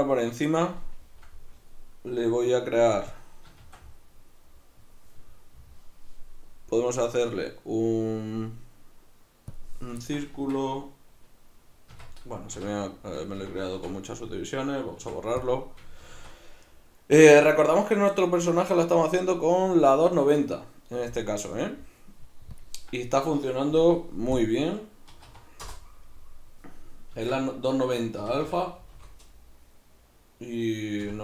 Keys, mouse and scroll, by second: 3.2 click, 3.6 shift+a, 10.0-20.1 ctrl+middle drag, 10.4 Tab, 12.6 z, 13.7 x, 16.1 shift+a, 27.2 Tab, 28.2 r.